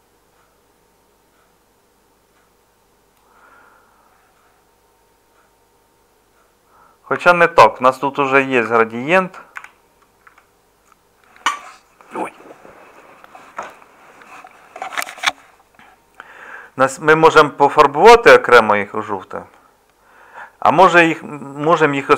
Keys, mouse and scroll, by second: 7.1 Escape, 8.7 Tab, 9.6 a, 10.2 Tab, 21.6 Tab.